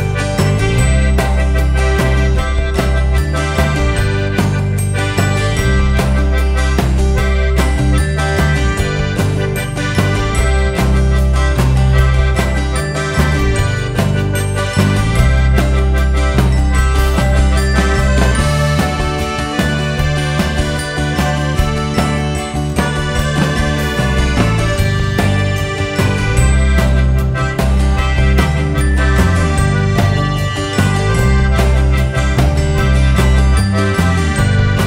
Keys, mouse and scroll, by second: 0.1 click, 0.1 KP_0, 0.4 scroll up 1, 1.2 scroll down 1, 1.6 scroll up 1, 2.6-6.2 drag, 6.2 scroll down 1, 7.0-7.3 scroll up 1, 9.0 click, 9.2 scroll down 1, 9.4 `, 9.6-10.2 scroll up 2, 9.8 `, 10.2 `, 11.0-13.5 drag, 13.4 Delete, 15.0 scroll down 1, 15.5 `, 16.4-17.3 scroll down 1, 17.3 click, 17.6-18.0 scroll up 1, 18.0-18.4 scroll down 1, 18.4 Tab, 19.6 3, 19.8 alt+click, 20.2 KP_Decimal, 20.4-20.7 scroll up 1, 20.7 scroll down 1, 20.8 e, 21.0 right click, 21.3 s, 22.0 right click, 22.3 alt+s, 23.0 2, 23.5 alt+click, 23.7 alt+shift+click, 24.2 ctrl+e, 24.6 right click, 25.7 ctrl+e, 30.3 scroll down 2, 30.6 scroll up 2, 30.8 Tab, 31.5 alt+click, 33.7 click, 34.4-34.8 drag.